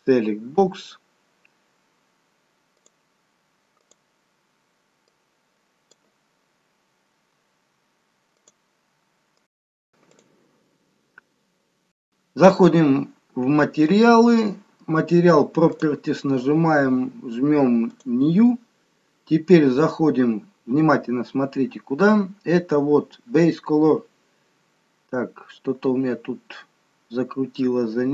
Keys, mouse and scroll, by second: 2.7 click, 3.9 click, 5.1 click, 15.8 click, 17.9 click.